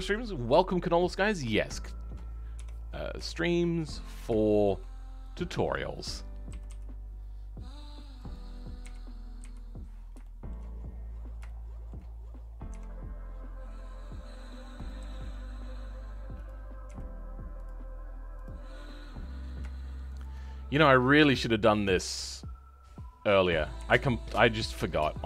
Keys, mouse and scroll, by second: 2.5 KP_7, 3.3 shift+middle click, 3.9-4.3 scroll up 2, 4.3-5.6 shift+middle drag, 5.6 click, 8.7 KP_1, 9.7-10.1 scroll down 2, 10.1 shift+middle click, 10.6-11.4 scroll up 2, 11.4-12.6 shift+middle drag, 12.6 r, 18.5 scroll down 2, 18.8-20.1 middle drag, 20.1 shift+click, 20.5-22.2 scroll down 3, 23.7 KP_3, 24.2-24.8 scroll up 2, 24.8 shift+middle click.